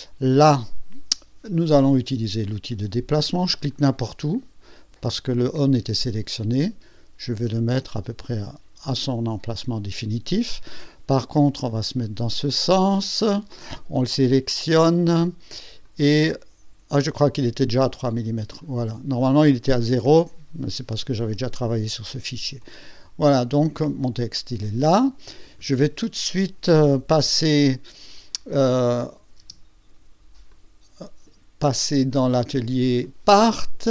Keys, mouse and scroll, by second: 0.3 click, 2.4 click, 3.7 click, 8.3 click, 11.2 KP_1, 13.2 click, 15.8 click, 16.4-16.7 scroll down 1, 17.0 scroll down 1, 17.5 scroll up 1, 18.0 scroll up 1, 18.9 scroll up 1, 22.6-23.8 drag, 24.0-24.8 drag, 29.0 click, 29.4 space, 30.5 click, 32.1 click, 33.0 click, 33.2 click.